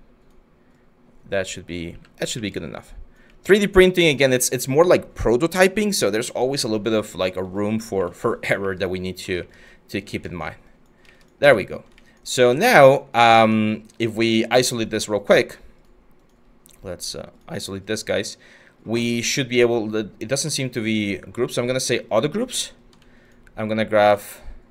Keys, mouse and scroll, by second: 1.5 q, 7.6 q, 9.6 w, 12.0 q.